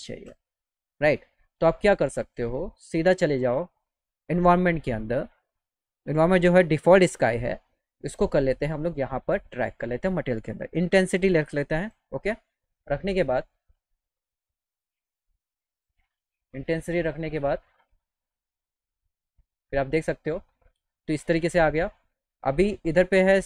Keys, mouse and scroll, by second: 1.8 click, 3.3 click, 9.5 click, 16.1 click, 17.4 click.